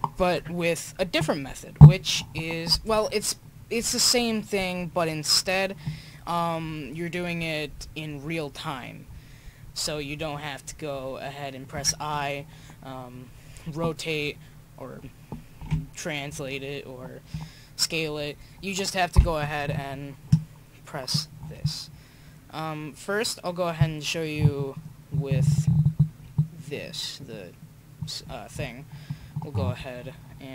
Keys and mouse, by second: 20.3-22.2 drag, 22.2-24.7 middle drag, 24.7-26.8 drag, 26.8-28.5 right drag, 30.4-30.5 middle drag.